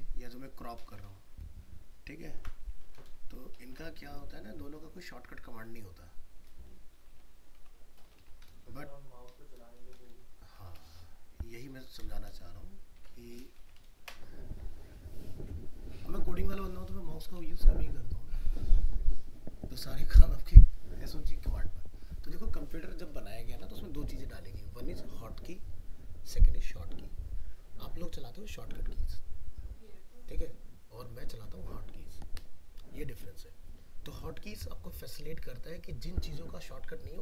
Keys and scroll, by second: 1.0 alt+i, 1.0 alt+p, 1.5 ctrl+d, 2.7 alt+i, 2.8 alt+r, 3.6 alt+shift+s, 13.0 ctrl+w, 13.9 ctrl+alt+0.